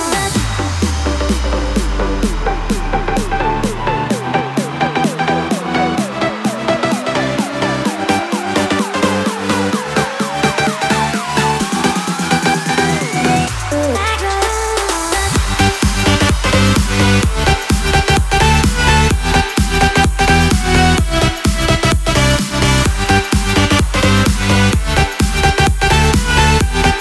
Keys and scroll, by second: 9.3 ctrl+0, 16.9 ctrl+u.